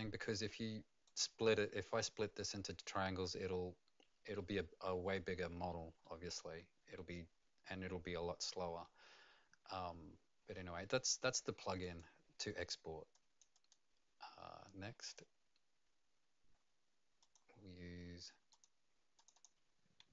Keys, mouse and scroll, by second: 6.0 middle click, 11.8 click, 13.1 click, 13.5 click, 15.1 click, 17.2 click, 19.1 click, 19.3 click.